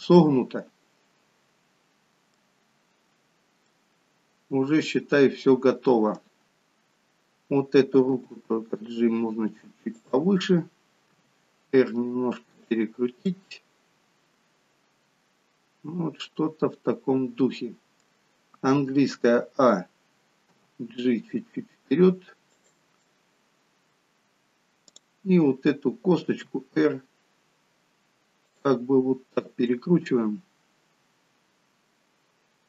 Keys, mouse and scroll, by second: 0.3 middle click, 3.9 middle click, 6.5 click, 6.9 scroll down 1, 8.2 g, 11.1 r, 13.3 middle click, 19.2 a, 20.5 g, 23.1 middle click, 24.9 click, 26.2 r.